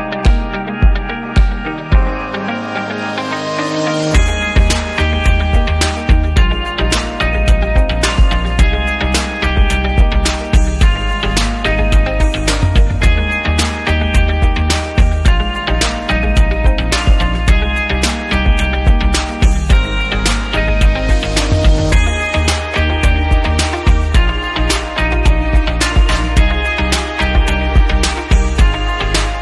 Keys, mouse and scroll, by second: 1.1 click, 2.1 click, 4.7 click, 6.0 click, 7.6 click, 9.1 click, 11.1 click, 12.3 click, 14.3 click, 14.4 double middle click, 15.4 click, 16.9 click, 19.2 click, 20.6 click, 20.8 click, 22.3 click, 23.6 click, 25.7 click, 27.1 click, 29.3 click.